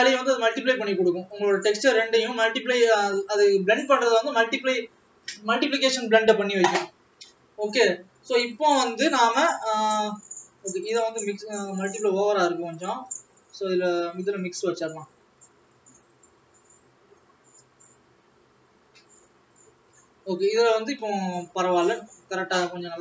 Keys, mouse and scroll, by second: 1.3 click, 3.1 click, 11.2 click, 14.4 click.